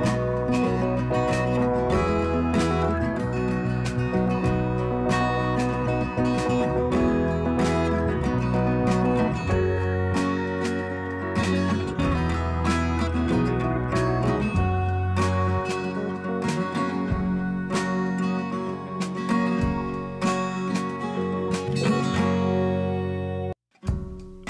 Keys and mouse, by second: 6.3 click, 9.1 click, 16.7 ctrl+z, 20.6 click, 24.0 click.